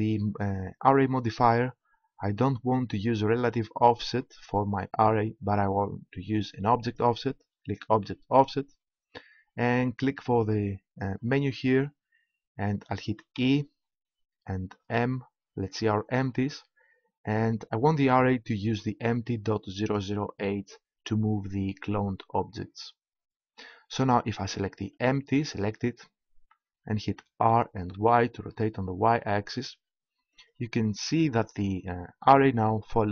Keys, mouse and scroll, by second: 3.8-5.8 drag, 6.8-8.7 drag, 10.0-11.9 drag, 24.9-26.8 right drag, 27.3 r, 30.5-32.3 drag.